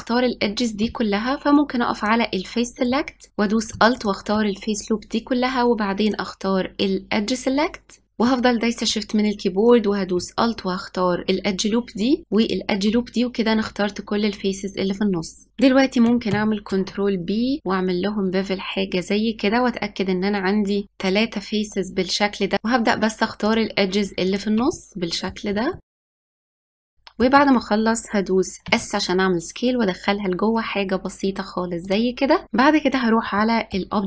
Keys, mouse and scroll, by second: 0.6-4.3 drag, 6.2-8.0 drag, 11.2 alt+shift+click, 12.6 alt+shift+click, 15.5-16.9 shift+middle drag, 16.9 ctrl+b, 22.5 scroll down 1, 23.1 shift+click, 23.4 shift+middle click, 23.8 shift+click, 24.0 scroll down 2, 24.1 shift+middle click, 24.2 scroll up 2, 24.4 shift+click, 24.5 shift+click, 24.8 shift+click, 24.9 shift+click, 25.2 shift+click, 25.3 middle click, 25.7 shift+click, 25.9 middle click, 26.2 scroll up 2, 26.3-26.9 shift+Left, 26.5 click, 26.7 click, 26.9-28.4 shift+middle drag, 28.4-28.9 scroll up 1, 28.9 s, 32.4 click, 33.1-34.0 middle drag.